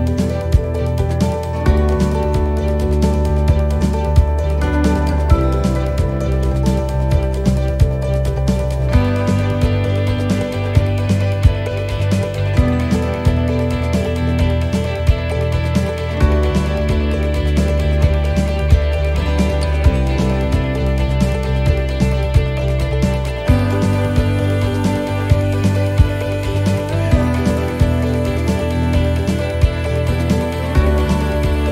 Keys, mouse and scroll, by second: 0.2 click, 2.5 click, 4.0 right click, 4.3 l, 5.3 click, 7.9 click, 9.6 scroll down 2, 10.5 right click, 10.9 l, 11.6 l, 12.4 click, 14.7 click, 16.1 middle click, 16.5 scroll up 3, 17.0 middle click, 18.0 click, 19.4 click, 20.4 middle click, 21.3-21.8 scroll down 3, 22.9 scroll down 1, 23.4 middle click, 23.8 scroll up 3, 24.7 right click, 25.0 l, 26.7 shift+d, 27.8 click, 31.4 right click.